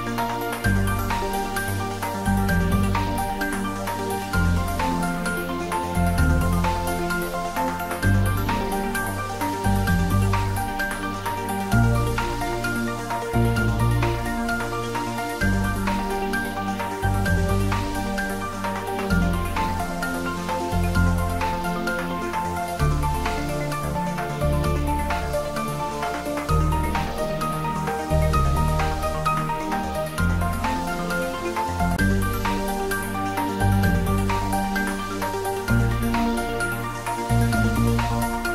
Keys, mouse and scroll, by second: 0.1 s, 1.5 click, 4.0 g, 9.1 click, 9.4-10.0 scroll up 1, 10.0 Tab, 15.1 x, 15.9 Left, 18.8 space, 20.0-20.6 middle click, 21.3-21.7 scroll down 1, 21.7 middle click, 22.7 s, 27.6 click, 28.0 middle click, 28.7 click, 29.7 3, 30.0 click, 30.9 alt+shift+click, 31.8-32.7 shift+middle click, 32.7-34.6 scroll up 2, 36.3 e.